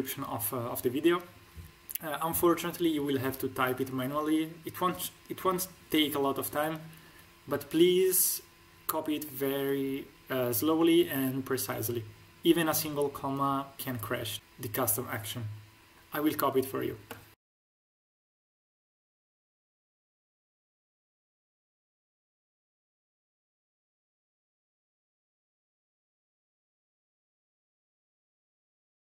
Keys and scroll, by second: 18.7 ctrl+alt+shift+;, 18.8 Return, 18.8 shift+2, 19.0 z, 19.1 shift+2, 19.3 Return, 19.4 ctrl+alt+shift+;, 19.4 Return, 19.8 Return, 20.0 ctrl+alt+shift+;, 20.2-28.0 typing, 20.6 Return, 21.4 ctrl+alt+shift+=, 22.5 ctrl+alt+=, 22.7 Return, 23.1 ctrl+alt+shift+p, 23.2 ctrl+alt+shift+;, 23.4 Return, 24.1 Return, 25.0 Return, 25.0 ctrl+alt+shift+=, 25.6 ctrl+alt+;, 25.7 Return, 25.9 Return, 26.8 Return, 28.1 ctrl+alt+shift+=, 28.3 Return, 28.5 ctrl+alt+shift+=.